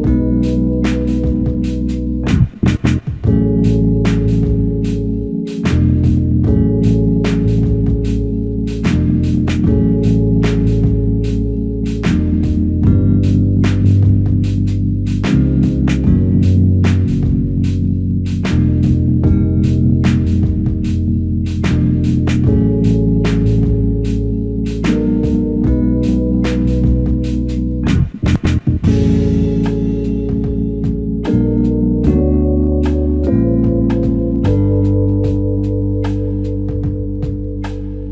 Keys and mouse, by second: 7.1 shift+click, 8.7 double click, 9.2 shift+click, 9.4 shift+double click, 9.8 shift+click, 11.4 double click, 12.4 shift+click, 13.5 shift+click, 17.2 typing, 18.3 typing, 21.2 double click, 24.7 click, 25.0 alt+click, 27.0 double click, 28.6 alt+click, 30.3 double click, 32.3 alt+shift+click, 38.0 double click.